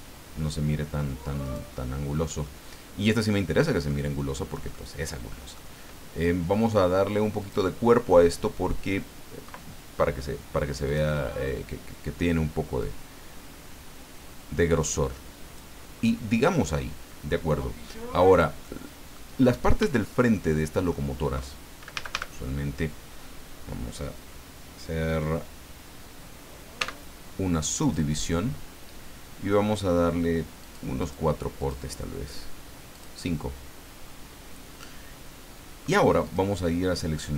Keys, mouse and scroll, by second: 1.4 right click, 2.4-4.0 middle drag, 4.3 scroll up 1, 4.7-5.7 middle drag, 7.4 click, 10.9 click, 12.8-15.7 drag, 18.6 middle click, 19.8 Tab, 20.3 middle click, 21.9 a, 26.7 w, 27.8 click, 30.6 click, 31.0 click, 31.6 click, 32.9 click, 36.2 click.